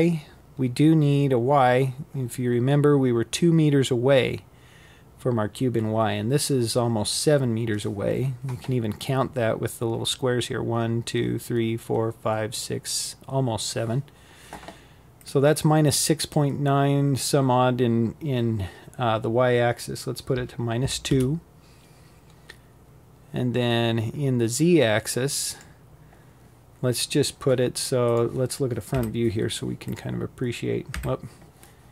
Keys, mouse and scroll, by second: 23.1-26.2 drag, 28.6 KP_1, 31.7 g.